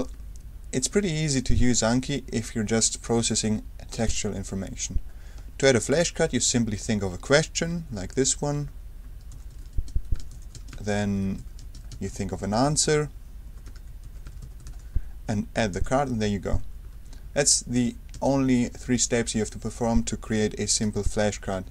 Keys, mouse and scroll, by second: 0.0 super+1, 4.0 click, 6.1 a, 8.7-15.1 typing, 13.7 Tab, 15.7 ctrl+Return, 16.8 Escape, 18.1 space, 20.7 space.